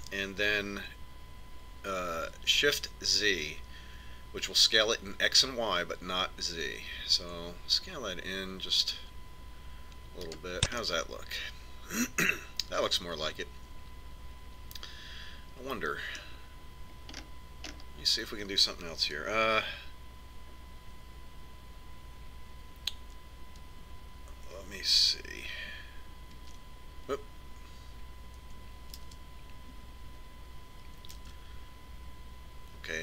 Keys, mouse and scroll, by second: 11.1-13.1 middle drag, 17.5-19.9 middle drag, 26.7 ctrl+s, 29.3 shift+s, 31.6 alt+s.